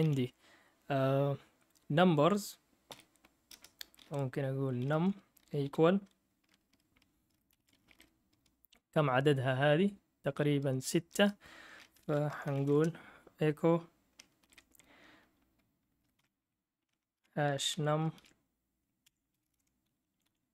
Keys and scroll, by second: 0.0 Down, 2.9 o, 3.5 Return, 4.4-5.6 typing, 7.3-8.5 typing, 11.2 Return, 12.1-13.2 typing, 14.2-14.9 typing, 15.9-20.0 typing, 19.0 Escape.